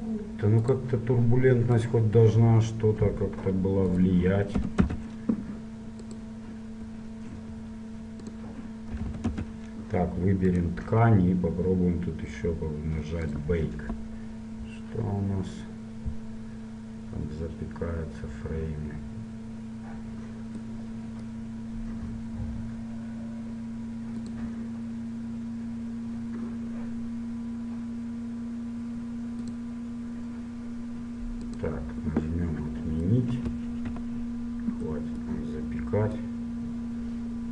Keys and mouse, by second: 0.2-2.7 drag, 1.9-3.6 right drag, 3.6 middle click, 4.1-5.9 drag, 6.2-10.2 drag, 10.6-12.4 right drag, 12.4-13.4 middle drag, 13.4-34.2 drag, 35.0-36.2 middle drag, 36.2-37.5 drag.